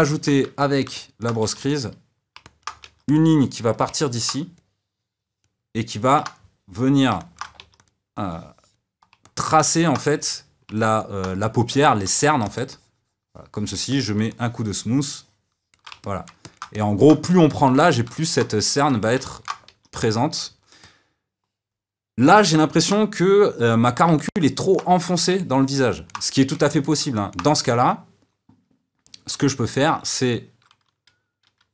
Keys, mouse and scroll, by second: 0.1-1.4 ctrl+middle drag, 1.4 f, 2.4 middle click, 2.8 f, 4.0 middle click, 4.6-7.2 drag, 7.2 middle click, 7.6 f, 8.1-9.2 drag, 9.2-12.2 middle drag, 12.2 f, 12.7-16.0 shift+drag, 16.0-19.7 middle drag, 19.7 f, 20.8-31.7 middle drag.